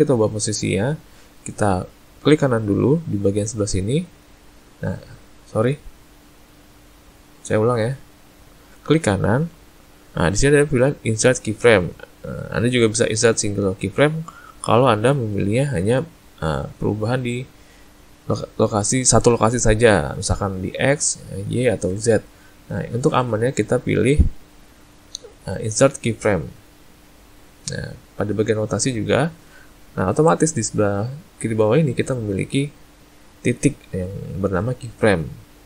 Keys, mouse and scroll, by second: 4.2 right click, 4.5 right click, 7.9 ctrl+z, 8.8 right click, 24.8 right click.